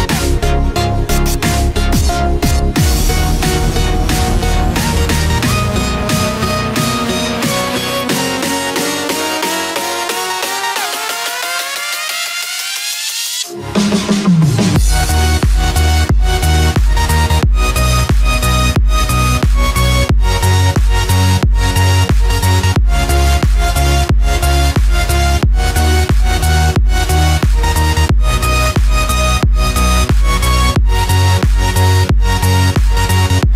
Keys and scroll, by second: 0.0 ctrl+d, 0.9 ctrl+-, 2.1 ctrl+0, 2.9 ctrl+=.